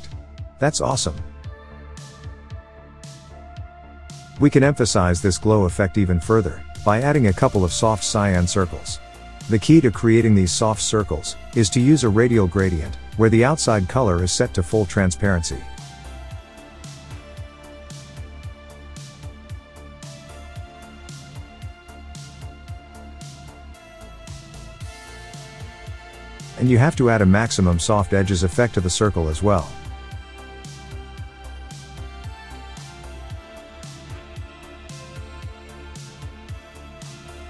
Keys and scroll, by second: 36.5 Tab.